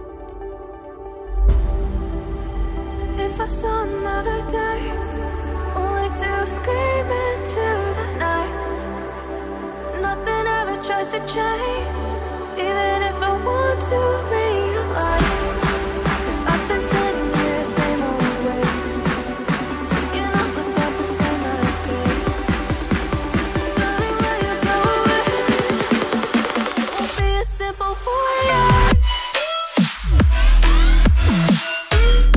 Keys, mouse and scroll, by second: 0.9 Escape, 8.3 double click, 9.7 double click, 11.2-11.7 ctrl+scroll up 1, 12.2-13.1 ctrl+scroll up 1, 18.2 ctrl+scroll down 1, 20.6-21.0 ctrl+scroll down 1, 21.0-21.9 scroll up 1, 22.1-23.6 ctrl+scroll up 1, 31.0 right click.